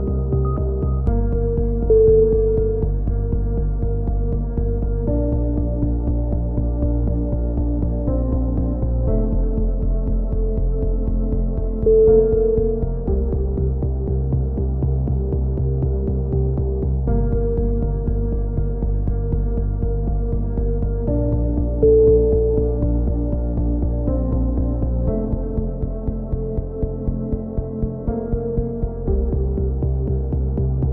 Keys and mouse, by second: 0.5-1.1 middle drag, 0.6 Tab, 1.1-1.6 drag, 1.6-2.8 right drag, 2.8 ctrl+KP_1, 3.0-5.9 typing, 4.6 click, 6.9 a, 7.0 z, 7.1 Tab, 9.0 KP_3, 10.4-11.3 middle drag, 12.1 Tab, 13.4 t, 15.4-16.3 typing, 16.7 Tab, 17.4 Tab, 17.9 r, 18.7 s, 19.1-20.4 middle drag, 20.5-23.4 middle drag, 23.5-24.8 middle drag, 23.8 s, 25.5 middle click, 25.6-26.6 drag, 26.9 a, 26.9-27.9 middle drag, 27.9-29.3 drag, 28.2 ctrl+l, 29.3 middle drag, 29.6-30.9 drag, 30.1 a.